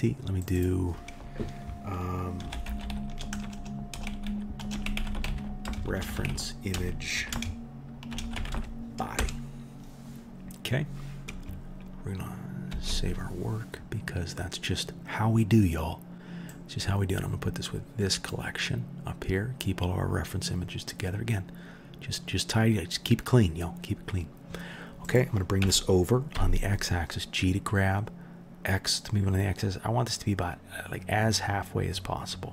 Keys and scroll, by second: 3.4 BackSpace, 3.5 BackSpace, 5.0 e, 12.7 ctrl+s, 25.6 g.